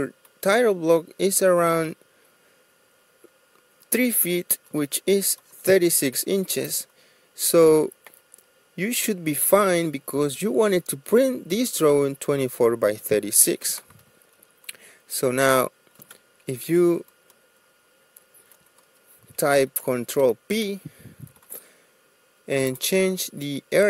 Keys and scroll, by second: 9.2 Delete, 20.1 ctrl+p.